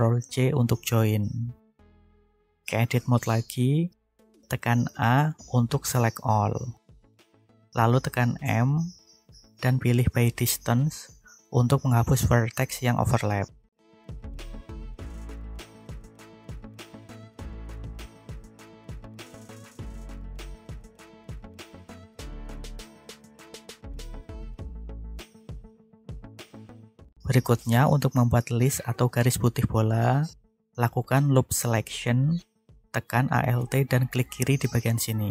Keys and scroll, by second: 2.1 Tab, 3.6 a, 7.2 m, 24.3 1, 26.6 alt+a.